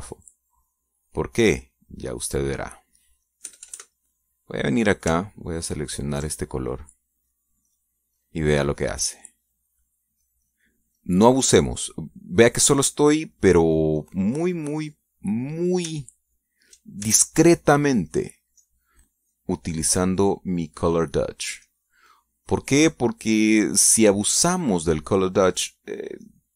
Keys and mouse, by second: 0.4 click, 1.7 click, 2.1 click, 3.8 click, 4.5 click, 4.9 KP_Add, 5.4 click, 7.3 ctrl+click, 8.5 click, 9.2 click, 10.2 click, 10.5 click, 11.6 click, 12.4 click, 13.0 click, 13.7-15.0 drag, 15.4 click, 15.8 click, 18.7 ctrl+click, 19.2 ctrl+click, 19.6 ctrl+click, 20.7 click, 21.1 click, 22.1-23.5 drag, 23.9-26.1 drag, 26.2 middle click.